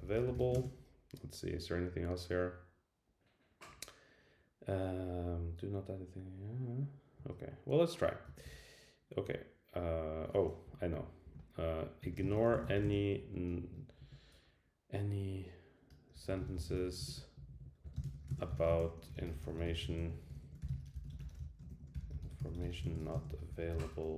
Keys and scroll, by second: 8.3 shift+Return, 10.6 Up, 11.3 Down, 20.3 alt+shift+Left, 21.7 alt+shift+Left.